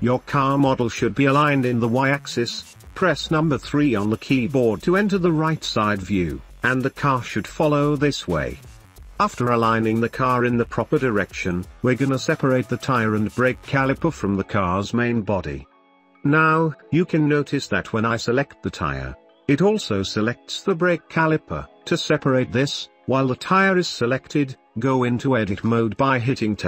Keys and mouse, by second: 0.5 middle click, 1.2-1.5 middle drag, 3.7 KP_3, 5.9-6.2 shift+middle drag, 7.2 middle click, 8.0 middle click, 10.6 ctrl+z, 10.8 ctrl+z, 12.2-13.2 middle drag, 13.7 shift+middle click, 14.3 shift+middle drag, 15.6 middle drag, 16.5 right click, 18.1 shift+middle click, 19.1 g, 22.2 g, 22.9-23.5 shift+middle drag, 24.5 Tab.